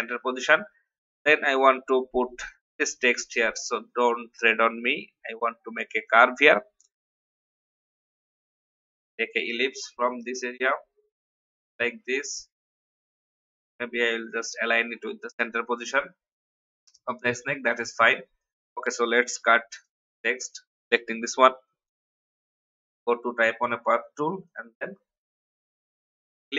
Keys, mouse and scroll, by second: 2.7-11.4 drag, 11.9-13.4 typing, 13.6 shift+click, 14.2 click, 19.3 ctrl+x, 20.4 click.